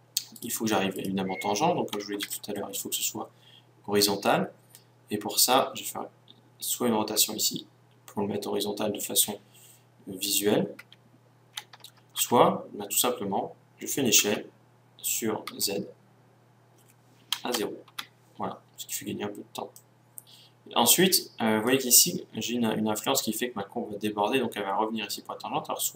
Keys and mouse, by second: 7.1 r, 14.2 s, 19.7-21.7 drag.